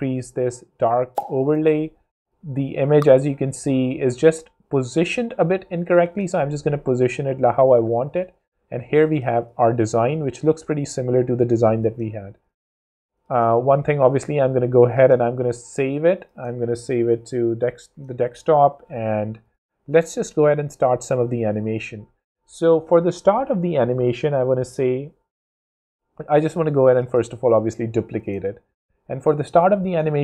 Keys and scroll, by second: 8.3 super+space, 9.0 space, 9.8 super+s, 10.2 super+space, 10.9 space, 11.0 Escape, 12.6 space, 13.9 super+s, 14.8-15.6 typing, 17.8 Return, 20.8 space, 26.4 super+d, 29.8 Home.